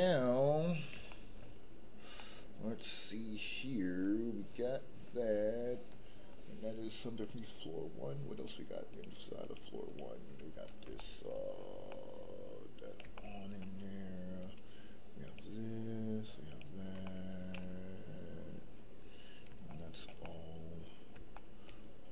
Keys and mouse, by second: 1.1 shift+middle click, 2.1-3.9 middle drag, 8.3 click, 8.9 click, 9.4 click, 9.8 click, 10.9 shift+middle click, 11.9-12.9 middle drag, 13.1 shift+middle click, 15.2 click, 16.5 click, 17.0 shift+middle click, 17.5-19.3 middle drag, 19.7 shift+middle click, 20.2 middle click, 21.3 shift+middle click.